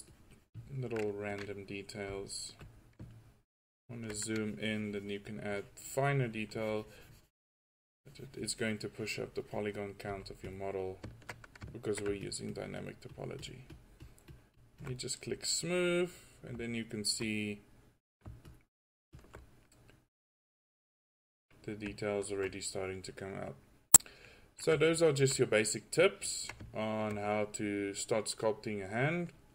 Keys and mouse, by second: 2.1 f, 5.1-5.6 drag, 10.1 f, 15.1 drag, 15.3 click, 16.9 middle click, 18.5-19.8 drag, 22.1 drag, 23.3-23.7 drag, 24.0-24.4 drag, 26.9-27.5 right drag.